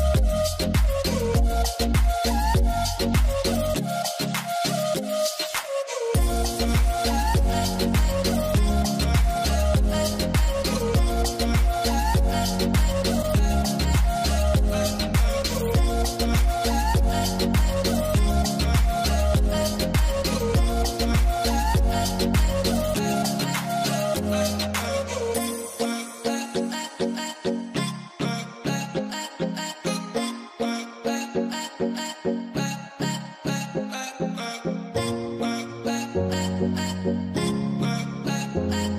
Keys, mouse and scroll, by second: 0.0 middle click, 1.8 scroll, 2.4 middle click, 3.5 scroll down 1, 5.2 scroll down 1, 5.9 w, 8.1 middle click, 9.5 double click, 9.6-10.4 typing, 10.1 scroll down 1, 11.3 alt+middle click, 11.7 alt+scroll, 11.9 middle click, 12.4 double click, 13.5 double click, 14.8 scroll up 1, 15.5 F4, 15.8 scroll down 1, 17.1-18.0 scroll up 1, 18.6-19.1 scroll down 1, 19.8-20.8 scroll down 1, 24.4 scroll down 1, 24.8 alt+middle click, 25.8 scroll up 1, 27.1 middle click, 27.9 scroll down 1, 29.4 scroll up 1, 29.6 alt+middle click, 29.9 scroll down 1, 30.3 scroll, 30.4 scroll down 1, 30.5-30.9 scroll up 1, 32.2 scroll up 1, 32.3 middle click, 32.9 middle click, 32.9 t, 33.2-33.8 scroll down 1, 33.8 e, 35.1 scroll down 1, 35.5 ctrl+z, 35.7 scroll up 1, 36.0 alt+middle click, 36.7 scroll up 1, 37.0 w, 38.6 middle click, 38.8 scroll down 1.